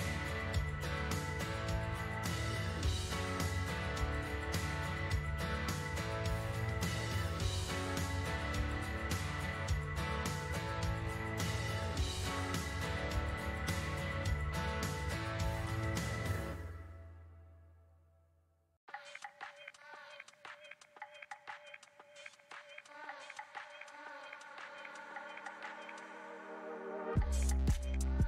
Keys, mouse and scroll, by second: 0.2-1.6 shift+drag, 1.6-17.8 middle drag, 18.4 click, 19.1 click, 20.7 shift+d, 26.7 click, 28.1 click.